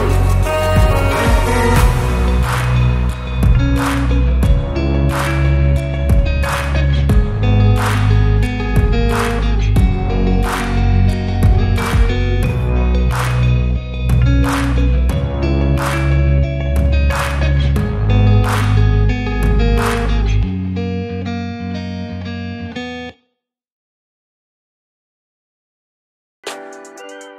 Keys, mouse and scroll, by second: 0.1 s, 0.8 Tab, 0.9 drag, 1.2 shift+click, 1.4 shift+click, 1.8 shift+click, 2.0 shift+click, 2.3 shift+click, 2.4 shift+click, 2.7 s, 6.9-7.2 scroll down 1, 7.2 s, 8.7 g, 9.7 scroll down 2, 9.9 click, 10.3 ctrl+c, 10.5 ctrl+v, 12.1 s, 13.3 g, 14.6 r, 15.2 g, 16.7 click, 17.1 scroll down 1, 17.3 click, 17.5-17.9 right drag, 17.9 click, 18.3 right click, 18.7-19.3 scroll down 6, 19.3-20.0 scroll up 8, 20.0 shift+click, 20.2 shift+click, 20.4 shift+click, 20.7 shift+click, 20.9 shift+click, 21.2 shift+click, 21.4 s, 22.1 click, 22.3 shift+drag, 22.5 shift+click, 22.8 shift+click, 22.9 shift+click, 23.1 shift+click, 23.3 s, 25.6 click, 25.8 Tab, 26.1 Tab, 26.4 click, 26.5-27.0 scroll down 5, 27.0 ctrl+s.